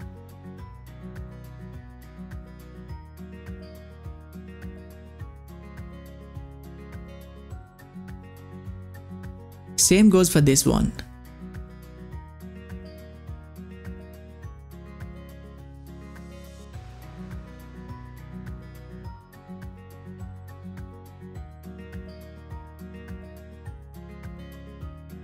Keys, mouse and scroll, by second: 5.8-23.0 drag.